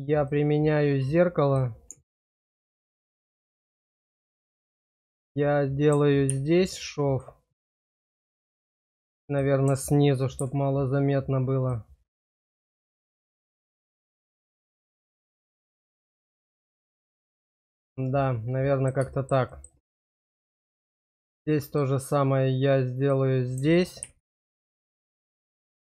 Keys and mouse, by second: 1.4 click, 2.4 click, 3.2 shift+click, 3.5 click, 4.8 click, 7.6 click, 8.3 shift+middle click, 12.7-14.1 middle drag, 14.9-17.7 middle drag, 18.3 click, 19.1 shift+click, 20.2 shift+click, 21.2 click, 22.9 click, 25.1 click.